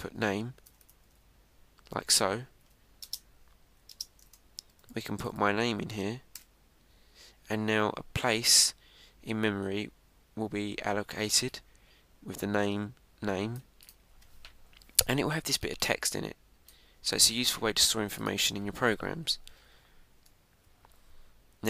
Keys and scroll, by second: 3.5 Right, 6.0 shift+", 6.5 Right, 20.4 Return, 20.6 Up, 21.1 Tab.